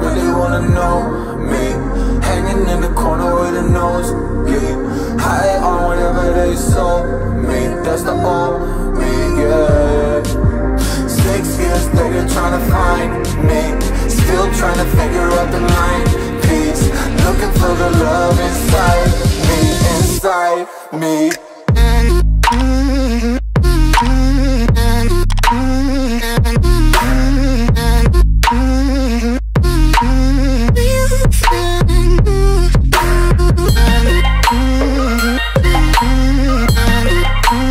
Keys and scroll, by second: 5.4 Return, 27.6 space, 32.2 ctrl+v.